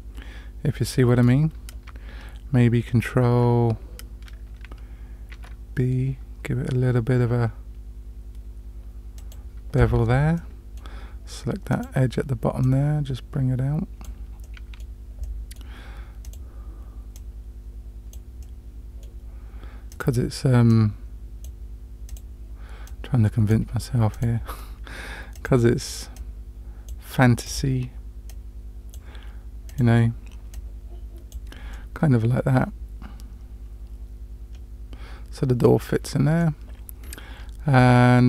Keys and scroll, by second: 5.3 ctrl+b.